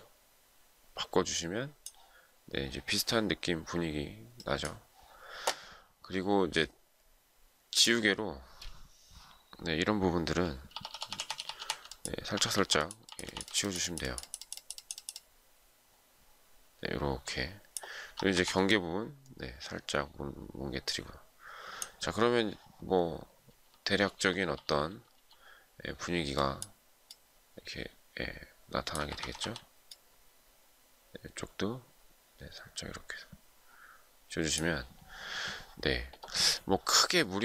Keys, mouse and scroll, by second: 11.3-13.5 typing, 17.9 typing, 19.2 typing, 23.7-24.1 typing, 26.0 typing, 28.6 ], 29.9 typing.